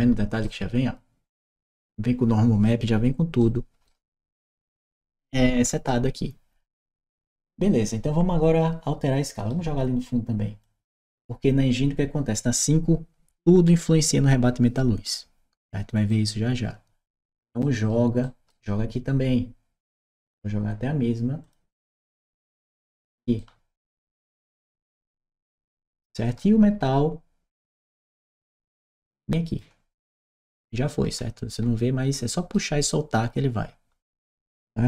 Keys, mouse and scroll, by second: 3.2 right click, 5.7-9.2 right drag, 10.4 click, 15.8 right click, 17.4 right click, 18.0 right click, 21.2 click, 22.0 click, 23.1-24.8 right drag, 25.3 right click, 27.3 click, 28.2-29.4 drag, 30.4-32.4 right drag, 30.9 d, 31.4 w.